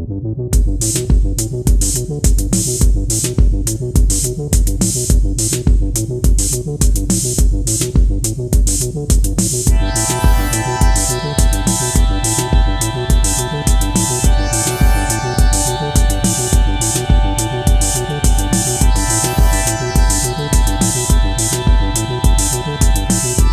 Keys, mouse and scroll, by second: 4.9 double click.